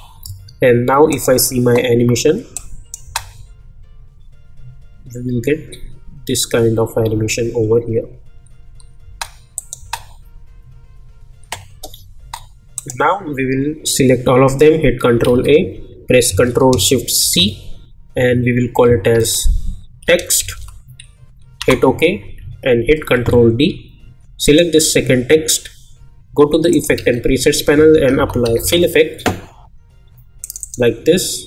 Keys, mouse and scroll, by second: 1.1 click, 3.0 space, 9.0 space, 9.5 click, 9.8 space, 12.1 space, 12.7 click, 15.2 ctrl+a, 17.2 ctrl+shift+c, 19.8-21.0 typing, 21.6 Return, 23.1 ctrl+d, 24.4 click, 26.7 click, 26.9 ctrl+a, 27.7-29.1 typing, 30.4 click.